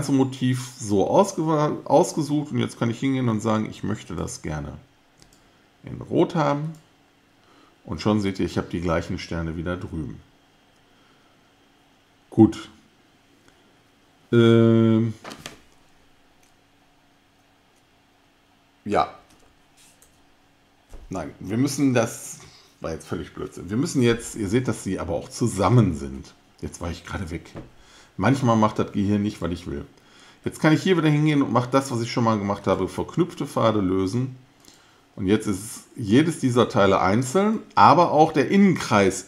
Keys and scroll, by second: 20.0 shift+super+g.